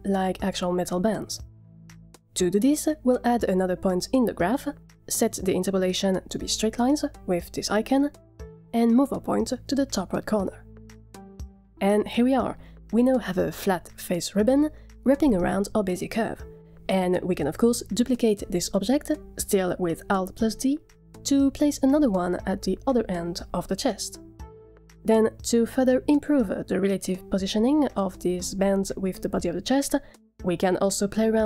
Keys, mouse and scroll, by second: 3.5 click, 4.1 click, 8.0 click, 9.3-11.3 drag, 13.4 click, 14.0-15.7 middle drag, 17.0 click, 17.2 middle drag, 20.3 alt+d, 24.8 click, 25.6-26.7 middle drag, 27.0 shift+middle drag, 27.6-27.9 middle drag, 28.2 shift+middle click, 30.4 scroll down 7.